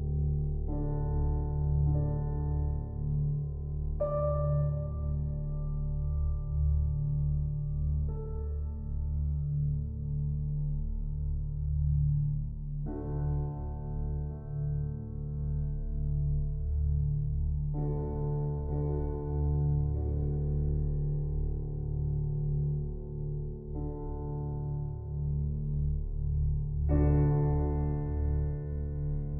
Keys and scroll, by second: 20.0 ], 27.9 [.